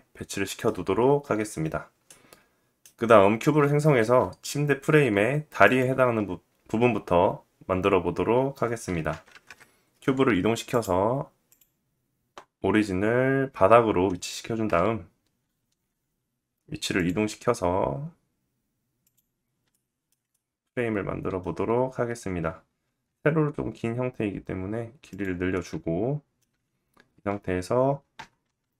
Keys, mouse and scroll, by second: 3.5 shift+a, 8.5 g, 10.3-16.6 drag, 14.2 KP_7, 15.0 g, 16.6 middle click, 16.9 s, 19.3-28.7 shift+middle drag, 22.4 s, 27.7 s.